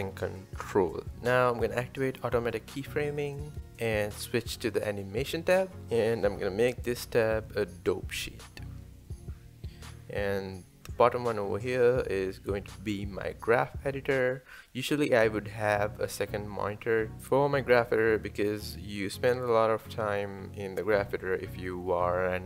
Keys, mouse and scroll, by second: 0.3-1.1 scroll down 2, 2.8 click, 5.0 click, 5.8 scroll down 1, 5.9 KP_1, 9.4 drag, 14.6-21.2 drag, 21.2 scroll down 3, 21.6 shift+middle click.